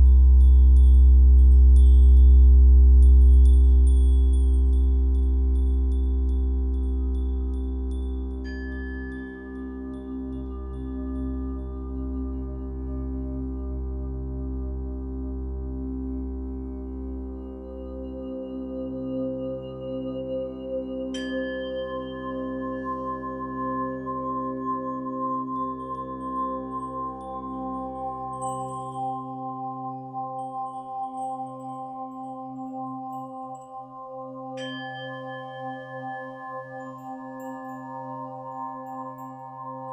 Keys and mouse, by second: 0.6 t, 0.9 alt+click, 1.6 click, 1.9 space, 3.8 Return, 4.1 ctrl+space, 4.2 click, 4.2 ctrl+space, 4.6 ctrl+t, 4.6 click, 4.7 ctrl+t, 5.8 ctrl+g, 5.8 click, 16.9 click, 17.1 z, 17.2 click, 22.3 z, 28.1 z, 31.1 ctrl+z, 31.1 typing, 33.1 ctrl+z, 33.1-34.3 typing, 37.1 z, 37.5 click.